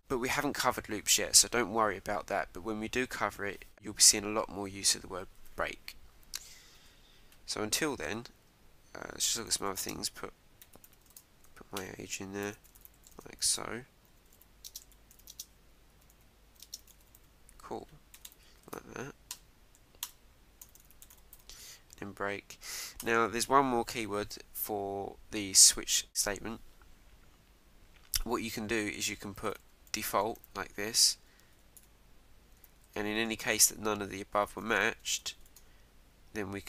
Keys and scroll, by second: 5.4 Down, 11.1 shift+;, 11.8 Return, 14.3 shift+', 18.7 ctrl+Right, 20.0 Return, 23.0 Return, 31.0 shift+', 32.8 shift+;, 33.1 Return, 35.6 shift+'.